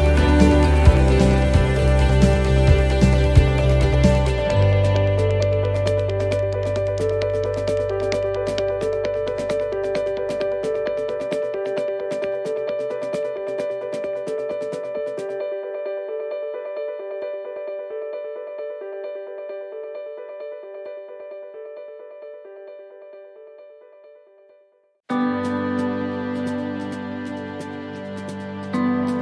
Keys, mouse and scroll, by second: 0.6 click, 3.4 middle click, 13.8 ctrl+r, 13.8 right click, 14.8 shift+right click, 16.0 click, 17.7 right click, 19.0 right click, 21.3 right click, 21.5 shift+right click, 22.2 click, 24.4 right click, 25.5 shift+right click, 26.6 click, 27.9 middle click, 28.9 shift+middle click.